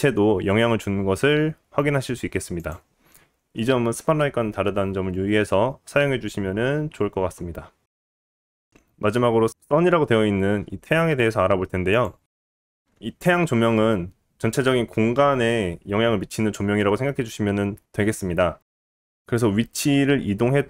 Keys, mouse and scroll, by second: 2.7-20.6 middle drag, 8.4 g, 8.8 x, 9.4 shift+a, 11.9 g, 19.6 g.